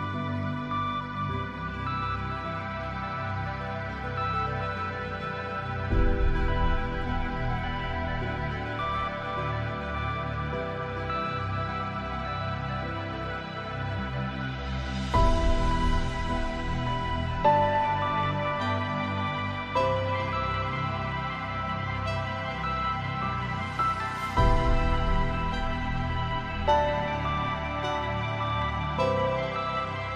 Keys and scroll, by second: 12.7 ctrl+j.